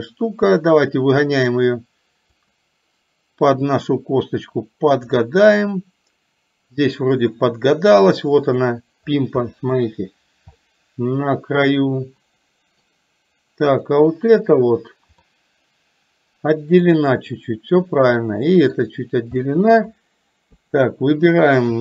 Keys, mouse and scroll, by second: 3.9-5.3 drag, 9.5 shift+middle drag, 10.6-13.0 middle drag, 13.8 click, 15.4-16.9 middle drag, 18.3 middle click, 19.5-19.9 middle drag.